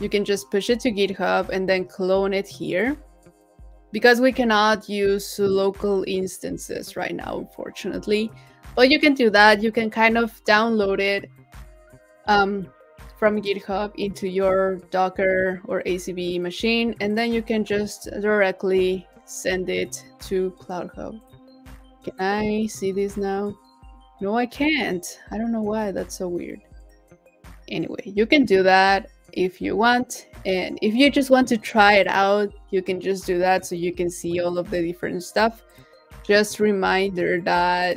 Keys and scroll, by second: 25.8 super+w.